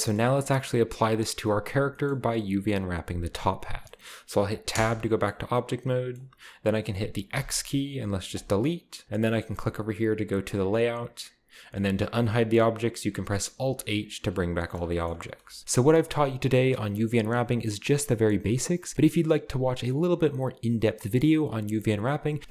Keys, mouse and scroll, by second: 0.0-1.4 shift+scroll up 2, 0.7 middle click, 1.8 shift+middle click, 3.8-4.4 scroll up 1, 4.4 middle click, 4.4-4.7 scroll up 1, 4.7 Tab, 5.6-6.0 scroll up 1, 7.3 x, 8.3 click, 10.4-12.6 drag, 13.6 alt+h.